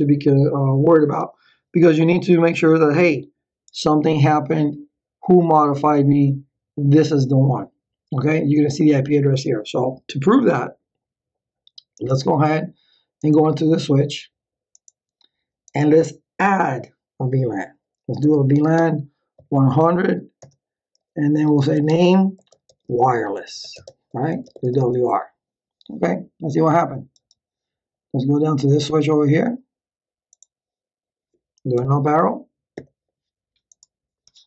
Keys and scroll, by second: 18.0-19.7 typing, 20.4 Return, 21.1-25.2 typing, 31.7 Up.